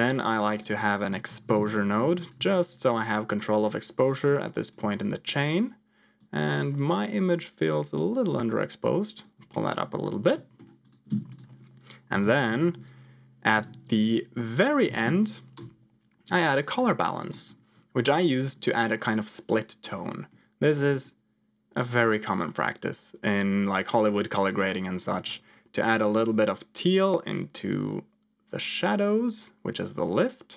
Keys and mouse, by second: 0.5-1.6 drag, 2.1 ctrl+click, 2.7 click, 4.1 ctrl+click, 6.1-9.2 shift+drag, 9.7 ctrl+click, 10.4 middle click, 10.7 click, 11.0 shift+a, 17.3 middle click, 17.8 ctrl+click, 20.3 middle click, 26.0-30.5 drag.